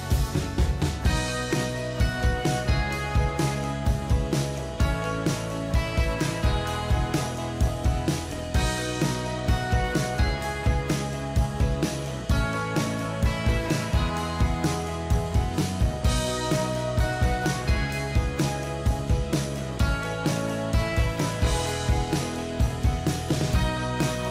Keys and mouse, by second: 2.2 s, 3.8 h, 4.0 o, 4.4 p, 5.1 ctrl+a, 5.5-7.8 typing, 10.2 ctrl+a.